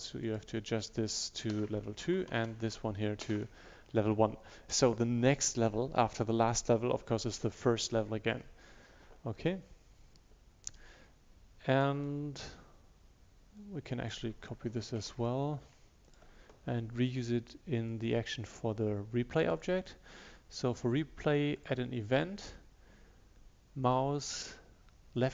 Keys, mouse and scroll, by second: 1.6-2.0 typing, 2.1 Down, 3.3 BackSpace, 11.9 click, 15.1 ctrl+c, 16.1 click.